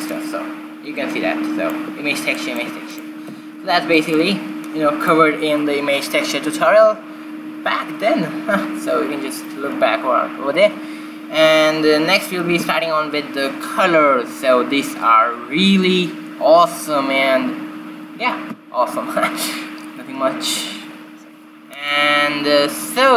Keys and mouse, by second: 0.0-1.6 drag, 0.0 b, 4.6 x, 6.9-8.3 drag, 8.0 x, 13.8 shift+a.